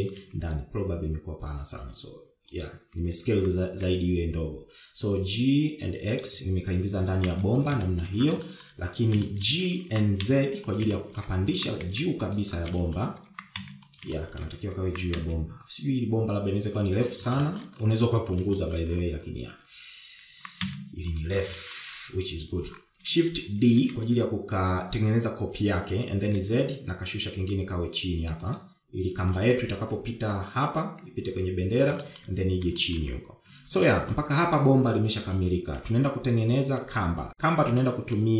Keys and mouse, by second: 1.4 s, 4.6 g, 8.0 KP_1, 8.5 shift+z, 9.0 shift+middle click, 9.6 shift+middle click, 10.4 shift+middle click, 11.1 g, 12.1 shift+middle click, 14.0 shift+middle click, 14.5 g, 15.3 shift+middle click, 16.1 g, 18.6 shift+middle click, 19.8 shift+middle click, 21.6 g, 22.8 shift+middle click, 24.9 shift+d, 30.6 shift+middle click, 33.2 shift+middle click, 34.0 shift+middle click, 34.7 Tab, 35.3-36.5 middle drag, 38.0 KP_1.